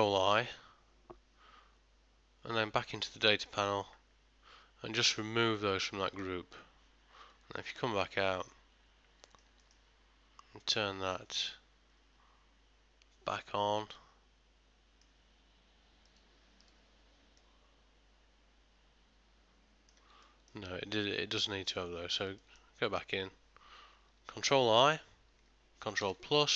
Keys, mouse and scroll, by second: 0.4 ctrl+i, 3.6 click, 7.4 Tab, 8.4 middle click, 9.7 ctrl+middle click, 10.7 click, 14.0 middle click, 16.3 click, 17.5 middle click, 20.3 ctrl+middle click, 21.8 Tab, 22.5 ctrl+middle click, 24.9 ctrl+i, 26.1 ctrl+KP_Add.